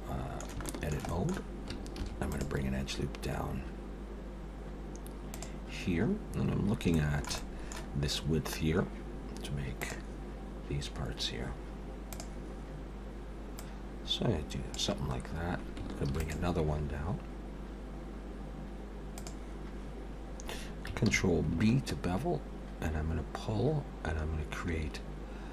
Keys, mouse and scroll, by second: 0.6 shift+middle click, 1.1 middle click, 1.9 ctrl+r, 5.9 scroll up 3, 6.9 shift+middle click, 7.3 middle click, 13.6 click, 15.2 scroll down 1, 16.1 ctrl+r, 21.0 ctrl+b.